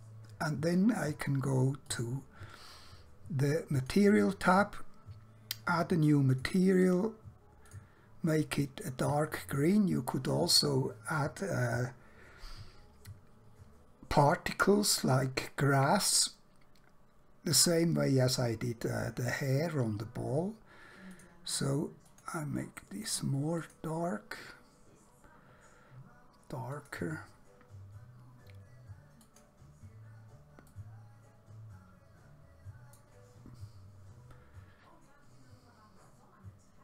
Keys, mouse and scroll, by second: 1.9 click, 6.4 click, 21.1 click, 26.7 click, 29.1 click, 30.7 middle click.